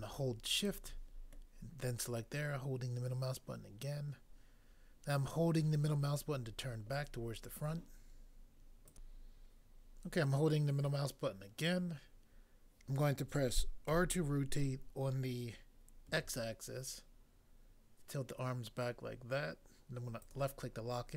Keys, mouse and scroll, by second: 0.6 click, 0.7 shift+click, 13.9 r, 16.0 x, 20.3 click.